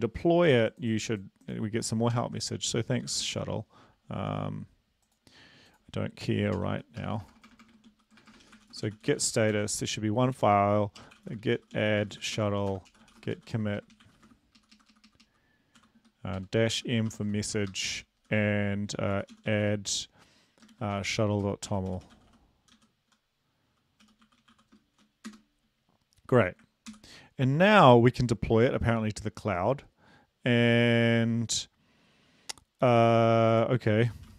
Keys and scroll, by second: 2.1 ctrl+l, 3.0 typing, 6.5-9.4 typing, 9.5 Return, 11.0-17.8 typing, 19.1-19.6 typing, 20.7-22.7 typing, 24.0-24.8 typing, 25.3 Return, 26.9 ctrl+l, 34.0-34.3 typing.